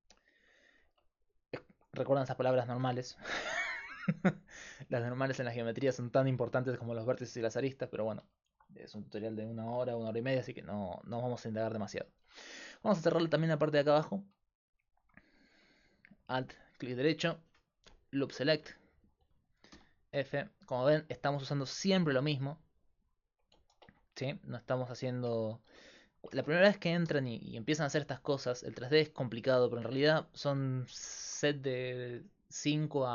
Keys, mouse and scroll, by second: 13.3 Tab, 14.1 right click, 19.8 f, 22.4 i, 23.6 ctrl+z, 25.7 alt+f, 26.4 ctrl+z, 27.1 f, 31.2-33.1 middle drag.